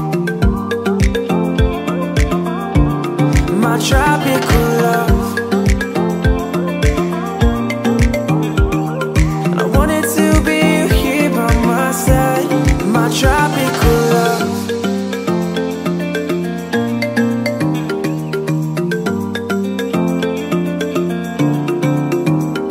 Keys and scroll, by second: 1.2 ctrl+t, 13.4 space, 16.9 ctrl+c, 17.1 space, 18.3 ctrl+v, 18.6 ctrl+a, 22.6 space.